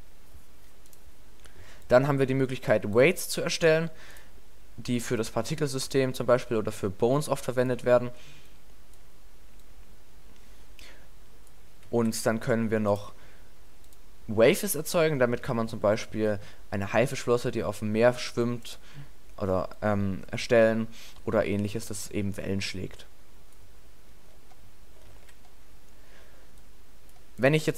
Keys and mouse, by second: 3.8-5.4 middle drag, 6.1 click, 8.1 alt+a, 8.7-11.5 drag, 12.0 alt+a, 13.2-14.1 drag, 15.5 alt+a, 22.8-24.3 middle drag, 25.1 alt+a, 26.7 click.